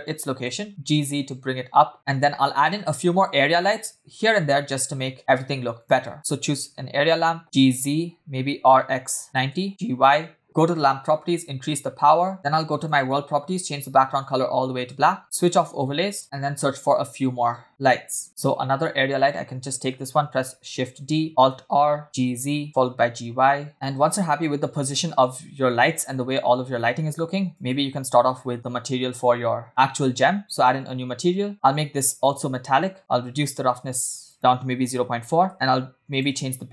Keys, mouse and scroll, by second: 0.5 g, 2.6 shift+a, 6.6 g, 8.5 r, 9.7 g, 10.5 click, 11.4-12.9 drag, 12.7 0, 13.5-14.3 drag, 15.6 click, 19.1 click, 20.5 shift+d, 21.4 alt+r, 22.0 g, 23.7 g, 23.9 space, 25.5 space, 26.9 space, 27.5 click, 30.5-30.9 drag, 31.5 click, 33.0-34.2 drag, 34.3 click, 35.5 middle click, 36.1 click.